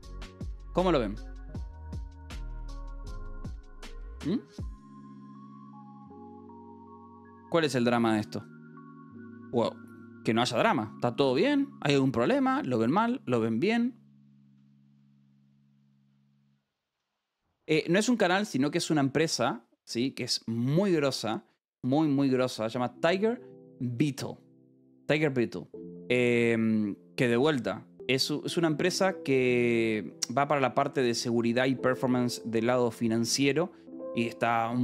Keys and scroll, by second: 1.5 ctrl+t, 2.2-3.2 typing, 3.5 Return, 17.5 Escape, 17.7 a.